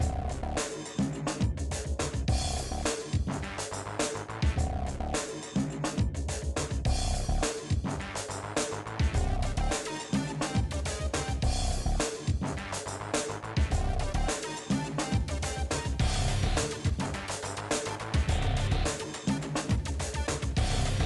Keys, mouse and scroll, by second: 0.0 click, 0.1 Delete, 0.7 click, 0.8 middle click, 1.9 middle click, 2.6-4.1 drag, 4.6 click, 4.8 middle click, 5.8 click, 6.4 f, 6.8 click, 7.1 middle click, 7.3 shift+click, 7.4 scroll up 1, 7.9 middle click, 8.0 f, 8.5 shift+click, 8.8 f, 8.9 shift+middle click, 9.1 shift+click, 9.5 f, 9.7 shift+click, 10.1 f, 10.3 middle click, 11.1 middle click, 11.7 shift+click, 12.2 f, 12.5 middle click, 13.0 shift+click, 13.2 right click, 14.1 f, 14.2 shift+click, 14.7 f, 14.7 middle click, 15.0 shift+click, 15.5 f, 15.7 middle click, 16.4-16.8 ctrl+z, 17.3 middle click, 17.5 shift+click, 17.8-21.0 typing, 18.2 shift+click, 18.7 shift+click, 19.5 shift+click, 20.2 shift+click, 20.7 shift+click.